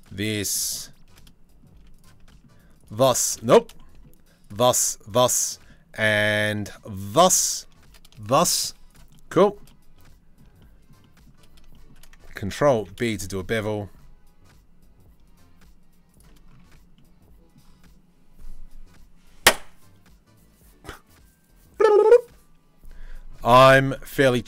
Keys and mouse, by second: 0.3 shift+middle click, 1.3 z, 3.1 ctrl+z, 3.4 shift+middle click, 5.1 middle click, 5.7-6.8 middle drag, 7.3 shift+middle click, 8.3 z, 12.3 ctrl+b, 16.3 Tab.